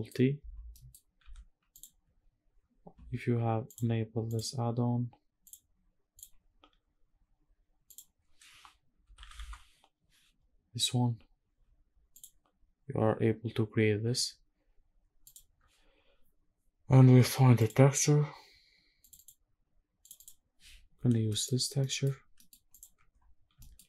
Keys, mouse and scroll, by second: 0.4 middle click, 0.9 g, 3.4 click, 5.1-5.9 drag, 14.5 scroll up 1, 16.8-17.2 scroll up 2, 17.2 click, 20.6-20.9 scroll up 2, 20.9 middle click, 21.5 middle click, 21.9 scroll down 1, 22.1 middle click, 22.4 click, 23.3 shift+middle drag, 23.8 middle click.